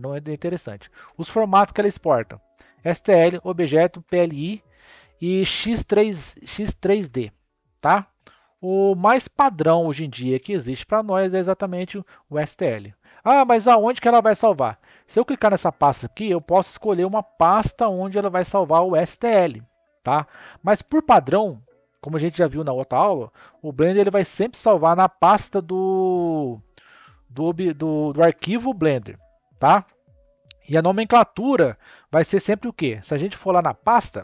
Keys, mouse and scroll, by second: 1.6-4.7 drag, 7.8 click, 9.4 click.